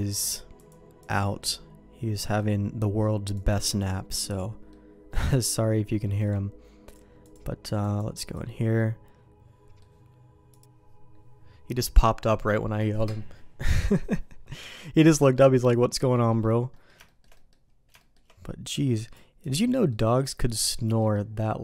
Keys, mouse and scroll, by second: 0.6 click, 1.0 click, 1.4 middle click, 3.4 click, 3.7 click, 4.3 middle click, 5.1 middle click, 6.1 middle click, 6.9 click, 7.9 click, 8.2 click, 8.8-9.8 middle drag, 14.6 middle click, 15.2 middle click, 16.0 middle click, 16.3 middle click, 16.7 middle click, 17.0 shift+middle click, 17.3 middle click, 18.0 shift+middle click, 19.0 click, 19.5 click, 19.9 middle click, 21.0 middle click.